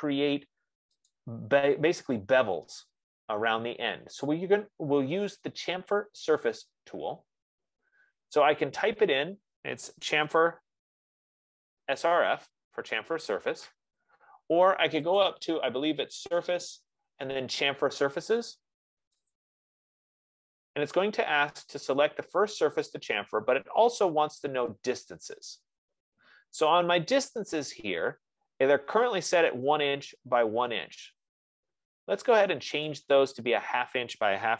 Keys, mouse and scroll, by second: 0.3 click, 1.7 click, 3.1 scroll, 10.2-12.9 typing, 14.4 Escape, 15.7 click, 19.6 click, 33.3 click.